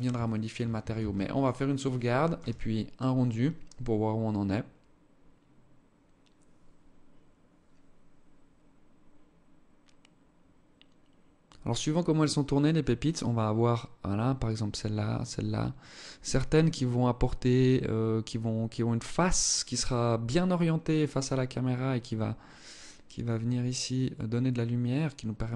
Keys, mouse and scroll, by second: 0.4 ctrl+s.